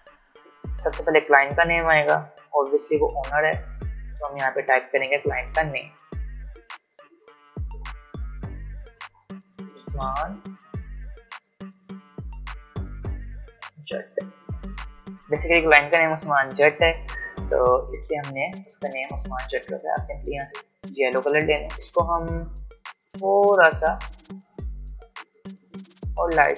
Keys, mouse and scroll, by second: 3.6 click, 6.9-10.5 typing, 12.0-13.4 typing, 19.2 i, 20.4 click, 21.7 v, 21.7-26.5 drag.